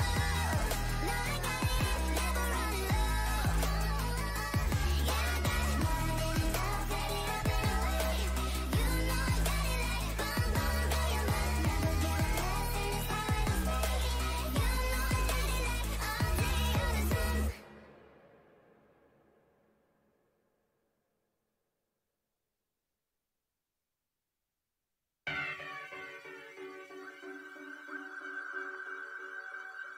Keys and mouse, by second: 0.7 a, 0.9 a, 1.1 z, 1.6 Tab, 1.9 a, 3.8 Tab, 8.4 Tab, 13.6-15.3 drag, 17.6-19.9 middle drag, 21.4-24.1 drag, 24.9 Tab, 25.6 a, 25.8 c, 27.0 w, 28.2 a, 28.3 c, 29.4-29.9 typing.